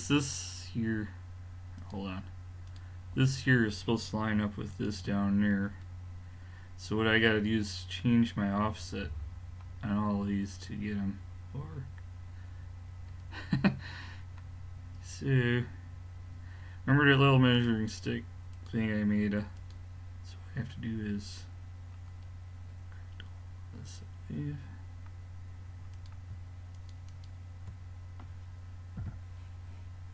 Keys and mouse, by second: 1.8-4.5 drag, 4.8-6.3 drag, 6.3-8.3 middle drag, 11.5-16.8 middle drag, 17.5-19.3 drag, 19.6-21.4 drag, 22.1-24.9 middle drag, 25.9-29.0 drag, 29.0 g.